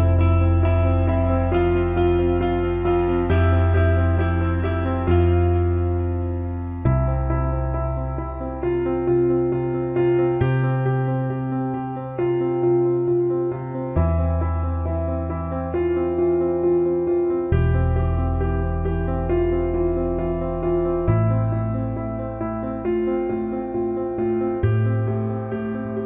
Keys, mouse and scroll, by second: 0.1-4.4 shift+drag, 4.8 click, 5.2 alt+middle click, 6.1 alt+middle click, 7.3 alt+middle drag, 7.7-9.2 right drag, 9.4 alt+middle click, 9.9 ctrl+z, 10.5-11.9 right drag, 12.3 alt+middle click, 13.0 click, 14.2 alt+middle click, 14.8 alt+middle click, 15.0 alt+shift+middle click, 16.5 alt+middle click, 17.1 alt+shift+middle click, 17.3 click, 18.5-19.6 drag, 19.8 alt+middle click, 21.4-24.8 shift+drag, 24.9 alt+middle click, 25.5 drag.